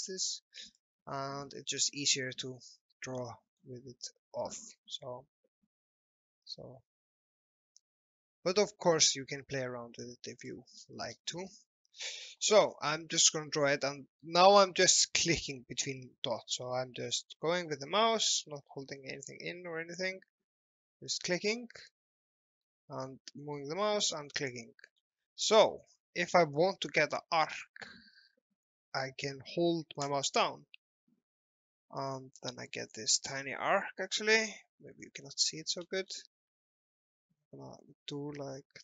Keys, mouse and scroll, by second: 0.7 click, 2.6 z, 3.3 alt+middle click, 4.5 l, 6.3 click, 10.3 click, 10.9-11.2 scroll up 1, 11.4 middle click, 12.7-13.2 scroll up 1, 13.2-13.8 scroll down 1, 13.9 alt+middle click, 21.3 click, 22.3 alt+middle click, 24.1 click, 24.5 alt+middle click, 28.7 scroll down 1, 30.1 click, 32.9-33.3 scroll up 1, 35.3 alt+middle click, 36.1-38.2 scroll down 1.